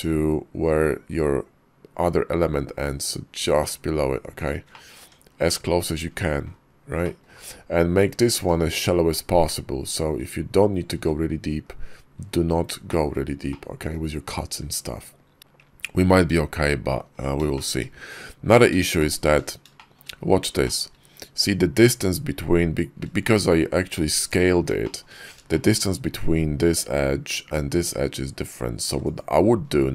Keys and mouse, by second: 4.5 click, 4.9 Tab, 5.5 KP_5, 6.9 drag, 8.2 click, 9.3-9.7 middle drag, 9.9 `, 10.8 `, 11.5 KP_5, 12.7 shift+middle click, 13.3-13.7 drag, 14.5 `, 15.3 shift+click, 17.4 shift+click, 18.8 shift+click, 19.6 shift+middle click, 20.5 shift+middle click, 23.1 shift+middle click, 24.7 shift+click, 25.3 shift+click, 28.7 x.